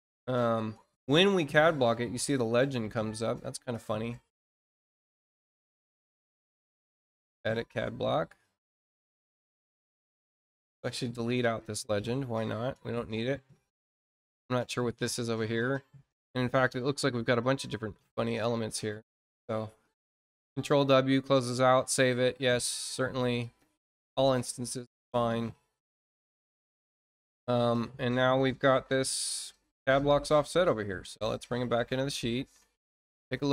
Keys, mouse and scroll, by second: 7.1 click, 9.1 click, 10.1 scroll down 1, 10.6 click, 13.2-14.2 scroll down 6, 14.4-15.5 drag, 15.8-16.5 scroll down 4, 16.7-17.3 scroll up 4, 17.7 scroll up 2, 19.1-20.5 scroll down 8, 21.8 click, 22.3 click, 24.0 click, 26.3-26.6 scroll up 2, 27.7 scroll up 2, 28.8 click, 30.8-31.9 ctrl+drag.